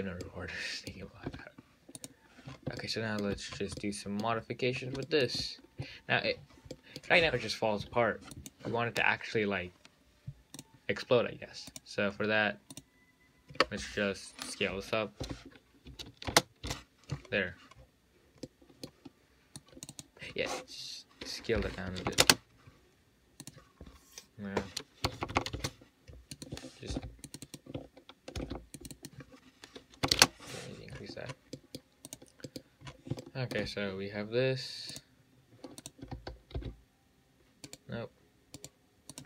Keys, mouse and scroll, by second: 0.2 click, 0.5-1.5 middle drag, 1.5 `, 2.2 click, 2.7-3.0 scroll up 1, 3.0-3.8 shift+middle drag, 3.8 scroll up 2, 4.0 middle click, 4.6-4.9 scroll down 1, 4.9-5.3 scroll up 2, 5.3-6.6 shift+middle drag, 6.6-6.9 scroll down 6, 6.9 scroll up 1, 7.0-8.6 middle drag, 8.6 click, 10.8 click, 11.9 click, 12.4-13.0 scroll down 6, 13.0 click, 15.4 s, 17.6-18.7 scroll down 15, 18.7-19.8 middle drag, 19.8-22.9 drag, 23.7-25.6 drag, 25.6 KP_0, 26.6-27.6 drag, 27.7-29.1 drag, 29.2-31.1 drag, 31.1-31.8 scroll up 14, 31.8-32.3 middle drag, 32.3 click, 32.7 middle click, 33.1-33.4 scroll up 6, 33.4-33.8 shift+middle drag, 33.8-35.1 shift+scroll down 1, 35.1-36.2 drag, 36.3 a, 36.8 x, 37.9-39.2 right drag.